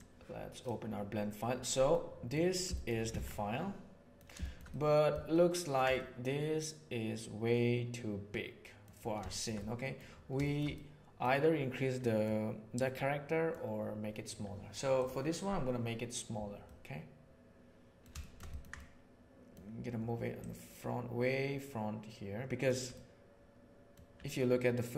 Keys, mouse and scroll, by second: 1.9-2.3 middle drag, 2.7 shift+middle drag, 3.1 alt+a, 3.3-8.9 middle drag, 9.3 shift+middle drag, 9.6-9.9 middle drag, 10.4 shift+middle click, 10.7-11.3 middle drag, 11.9-12.3 middle drag, 12.9-13.5 middle drag, 16.7-18.0 middle drag, 18.2-18.6 ctrl+shift+middle drag, 18.8-19.5 middle drag, 20.5-22.3 middle drag, 22.3 click, 22.9-23.8 middle drag.